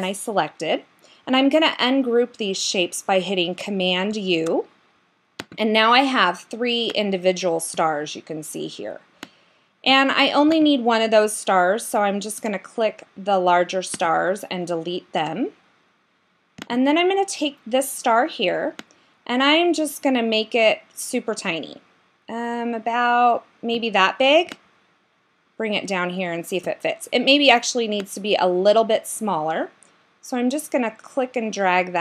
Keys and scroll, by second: 4.1 super+u.